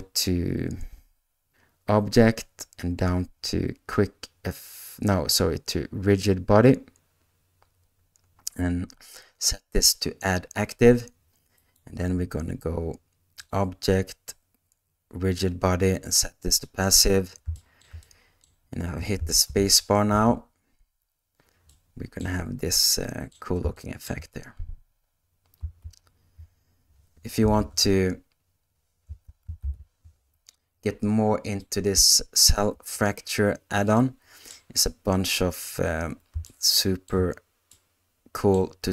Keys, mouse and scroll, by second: 4.0-10.9 drag, 13.7-17.4 drag, 17.5 shift+middle click, 18.0 middle click, 19.9 shift+Left, 20.1 space, 21.8 middle click, 23.0 middle click, 23.9 shift+middle click, 25.7 ctrl+z, 27.5 shift+Left, 29.0 space, 29.6 shift+Left, 31.7 click, 32.7 space, 34.1 middle click, 36.5 shift+middle click, 37.8 middle click.